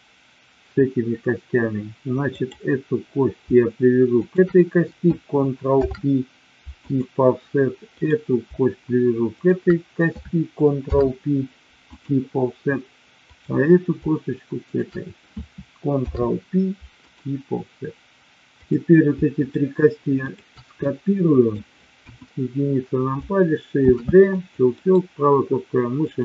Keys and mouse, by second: 2.3 click, 4.2 shift+click, 5.7 ctrl+p, 7.9 click, 10.8 ctrl+p, 13.2 click, 14.5 shift+click, 15.9 ctrl+p, 18.7 click, 20.2 shift+click, 20.7 middle click, 22.0 KP_1, 23.8 shift+d, 24.3 click, 24.8-26.2 right drag.